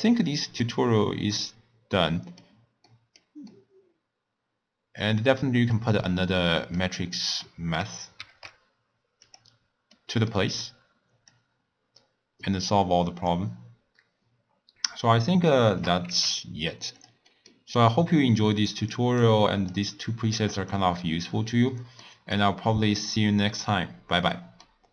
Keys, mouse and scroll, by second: 0.3 middle click, 0.8-1.3 scroll down 4, 1.3-7.3 middle drag, 7.3 click, 8.4 shift+d, 9.9-11.3 middle drag, 11.3 click, 15.5 shift+right click, 16.0 g, 17.3 middle click, 17.6-18.8 scroll up 3, 18.8 click, 19.2-20.8 drag, 21.7-22.3 middle drag, 22.3 click, 24.3-24.9 middle drag.